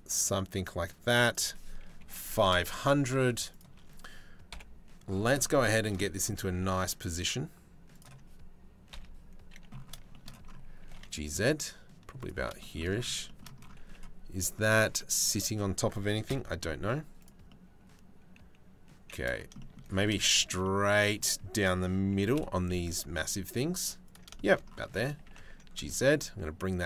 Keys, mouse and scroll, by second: 0.8-2.1 drag, 1.9 KP_0, 3.1 shift+middle click, 4.1 KP_7, 6.1 g, 8.5 KP_3, 10.4 g, 14.6 click, 15.9 KP_Decimal, 16.4 z, 20.1 middle click, 20.2 click, 20.4-21.7 middle drag, 21.7 g.